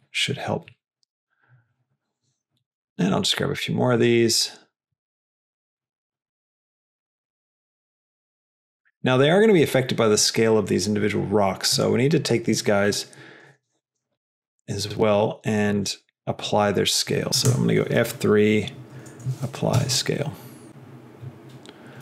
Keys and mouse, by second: 4.2 click, 5.2 click, 11.6 click, 16.1 click, 18.1 F3.